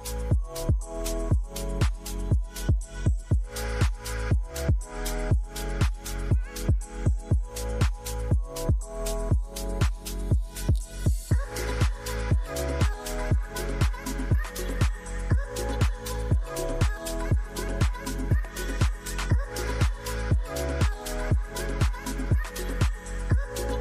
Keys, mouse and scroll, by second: 2.5 right click, 4.5 F12, 6.8 typing, 7.3 Return, 12.9 shift+click, 14.3 t, 16.5 typing, 17.9 typing, 22.0 typing.